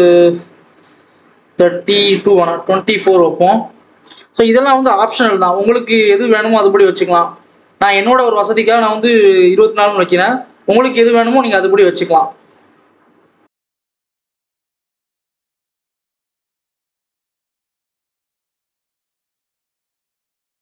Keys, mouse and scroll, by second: 3.0-4.8 drag, 4.8 Tab, 5.5 r, 7.6 KP_7, 8.1 KP_1, 9.1 s, 11.0 ctrl+KP_7, 12.4 KP_7, 14.2 click, 15.3 s, 16.1 s, 17.4 Tab, 17.6 alt+a, 17.8 click, 18.8 Tab, 19.0 s, 19.5 s.